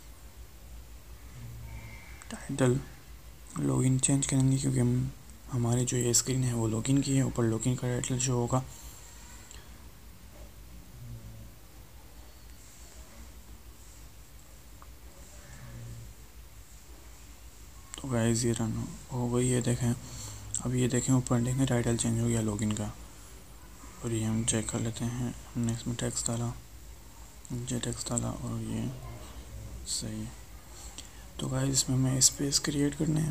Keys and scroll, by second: 8.3 alt+Tab.